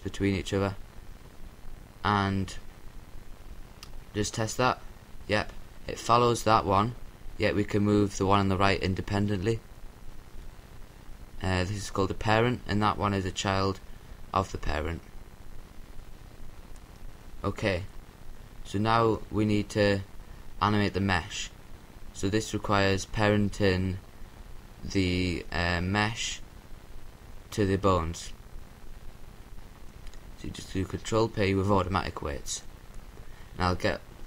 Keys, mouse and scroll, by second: 1.6-4.2 right drag, 6.3-8.2 right drag, 10.4-12.1 right drag, 12.1-13.7 drag, 13.1-16.1 right drag, 15.0-17.3 middle drag, 21.0-22.9 right drag, 26.3-28.1 right drag, 27.6 ctrl+p.